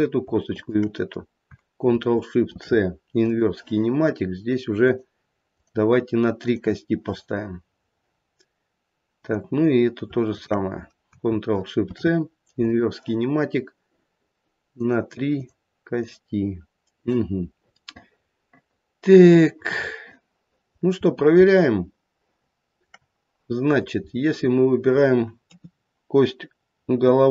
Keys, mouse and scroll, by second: 0.5 shift+click, 2.5 ctrl+shift+c, 4.8 click, 5.5 click, 6.4 click, 9.2 click, 10.3 shift+click, 11.8 ctrl+shift+c, 14.8 click, 15.3 click, 16.0 click, 17.3-17.7 scroll down 2, 17.7 middle click, 18.6 middle click, 19.0 middle click, 19.2 middle click, 20.9-21.3 scroll up 3, 21.5 shift+middle click, 22.9 shift+middle click, 23.7 click, 24.2-25.2 scroll down 2, 25.4 KP_3.